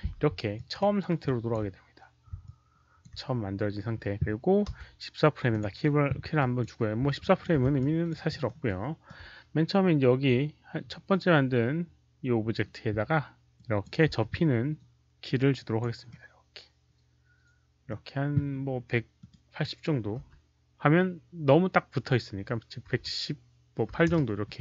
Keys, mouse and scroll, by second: 0.5 ctrl+alt+click, 0.7 alt+right click, 1.2 ctrl+alt+click, 2.4 ctrl+alt+click, 4.6 Return, 4.6 ctrl+click, 4.6 alt+right click, 4.6 s, 4.6 KP_0, 5.4 ctrl+click, 6.3 Return, 6.3 ctrl+alt+click, 6.3 alt+right click, 6.3 s, 6.3 KP_0, 7.1 ctrl+alt+click, 7.7 ctrl+alt+click, 8.2 alt+middle click, 8.6 ctrl+alt+click, 8.6 alt+right click, 11.5 ctrl+click, 11.5 alt+middle click, 11.5 s, 13.5 click, 13.7 alt+middle click, 13.7 s, 14.0 e, 15.1 ctrl+click, 16.0-17.8 alt+middle drag, 19.1 alt+click, 20.1 KP_1, 22.8-24.0 typing, 24.0 Return, 24.0 click, 24.0 middle click.